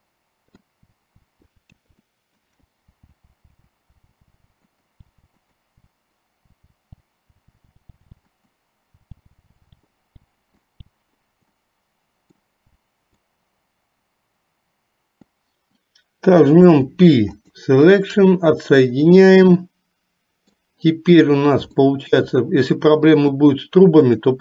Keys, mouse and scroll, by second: 0.9 l, 1.2 l, 1.7 ctrl+z, 2.0 middle click, 3.0-5.3 typing, 4.7 middle click, 5.4 middle click, 6.7-10.2 typing, 8.4 middle click, 10.6 click, 11.5 middle click, 12.7 l, 13.2-15.5 middle drag, 16.7 p, 19.5-20.8 middle drag, 22.1 shift+middle click, 24.2 click.